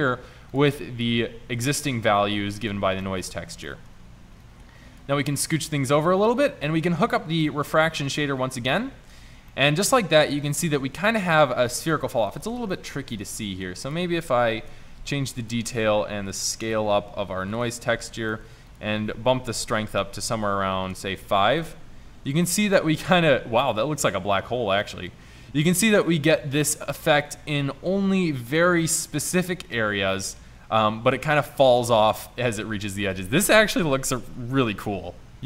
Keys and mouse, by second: 6.8 click, 14.7-15.5 drag, 21.7-22.5 middle drag, 23.2 middle click, 23.3 middle click, 23.8 middle click.